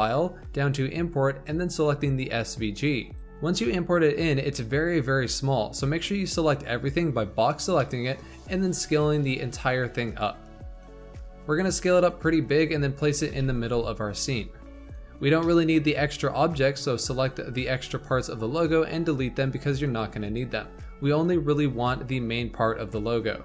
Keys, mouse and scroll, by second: 4.5-5.8 middle drag, 5.8 click, 7.0-7.7 scroll up 4, 7.7-8.7 shift+middle drag, 8.7 s, 11.1 s, 13.1 g, 15.4-15.8 shift+middle drag, 15.8-16.4 scroll up 4, 16.4 click, 17.0 x, 17.5 click, 17.7 x, 18.5 click, 19.1 drag, 20.1 x, 21.1 click, 21.5 x, 22.8 x.